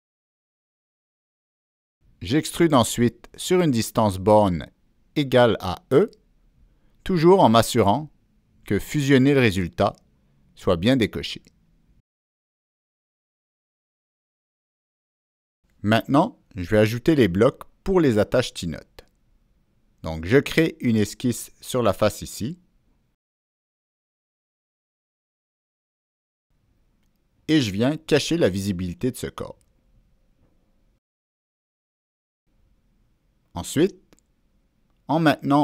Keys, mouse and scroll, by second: 0.3 click, 2.3 Escape, 3.5 Escape, 4.1 click, 4.2 Escape, 6.4 Escape, 6.4 click, 8.0 click, 8.8 Down, 9.3 Return, 10.2 Down, 10.6-11.6 middle drag, 10.7 Down, 10.7 Return, 14.0 click, 14.1 middle click, 15.3 click, 17.2 middle click, 18.6 click, 18.6 middle click, 20.6 click, 20.6 middle click, 22.5 Escape, 22.9 click, 23.1 Escape, 24.0 right click, 24.1 Escape, 24.1 click, 29.4 click, 30.0 right click, 31.6 click, 32.9 middle click, 33.1 click, 33.1 right click, 34.5 click, 34.6 middle click.